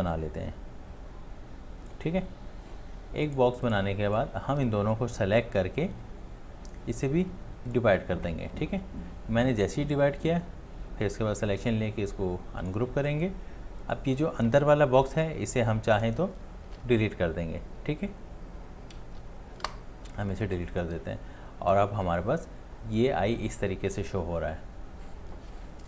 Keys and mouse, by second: 11.7 space, 16.7 ctrl+z, 19.6 Delete.